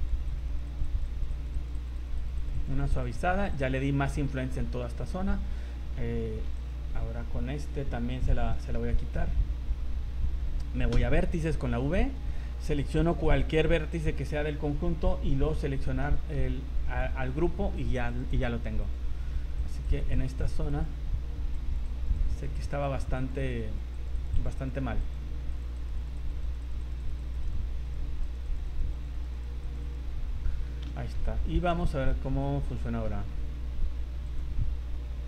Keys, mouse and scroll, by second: 0.3 click, 0.5 click, 0.7 click, 1.0 click, 1.2 click, 1.4 click, 1.6 click, 1.8 click, 2.0 click, 2.2 click, 2.5 click, 2.7 click, 2.9 click, 3.0 click, 3.3 click, 3.5 click, 3.8 scroll down 2, 4.8 shift+middle click, 6.5 v, 6.6 right click, 8.5 shift+middle click, 10.9 v, 13.0 right click, 15.4 click, 16.0 middle click, 17.3 scroll up 1, 18.1 click, 19.6 click, 19.8 click, 20.2 click, 20.4 click, 20.8 click, 21.7 click, 21.9 click, 22.3 click, 22.7 click, 22.9 click, 23.3 click, 23.5 click, 23.7 click, 24.1 click, 24.1 click, 24.4 click, 24.6 click, 25.0 click, 25.8 click, 26.0 click, 26.2 click, 26.4 click, 26.7 click, 26.8 click, 27.1 click, 27.3 click, 27.5 click, 27.9 click, 28.2 click, 28.5 click, 28.7 click, 29.0 click, 29.2 click, 29.3 click, 29.6 click, 29.8 click, 30.2-30.8 scroll down 5, 30.4 middle click, 31.0 shift+middle click, 31.2 middle click, 31.7 v, 31.7 scroll up 2, 32.1 z, 32.4 middle click, 33.1 middle click, 33.3 shift+middle click, 34.2 click.